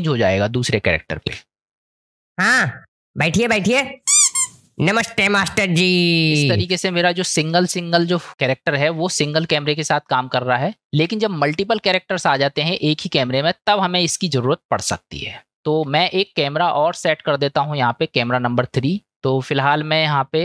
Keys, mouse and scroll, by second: 1.3 space, 6.7 space, 10.8-11.4 middle drag, 12.2-13.7 middle drag, 15.2-15.8 shift+middle drag, 16.6-17.0 middle drag, 19.4 click.